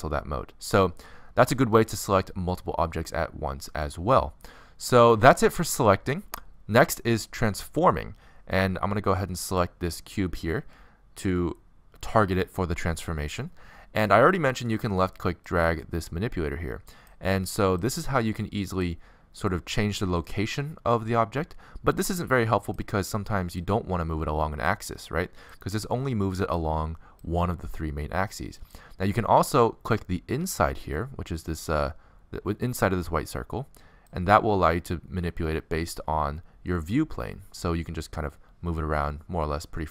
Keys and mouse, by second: 2.5-4.3 middle drag, 10.2-15.2 right drag, 15.2-17.1 drag, 18.0-22.1 drag, 22.9-28.0 drag, 28.5-36.1 drag.